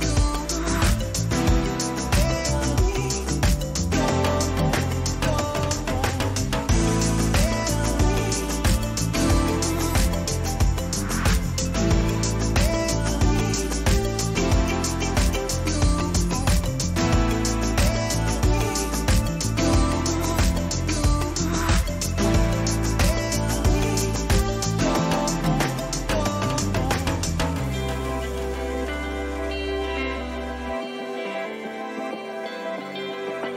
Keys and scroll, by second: 7.3 ctrl+alt+z, 18.4 ctrl+alt+z, 26.2 ctrl+alt+z, 29.8 ctrl+alt+z.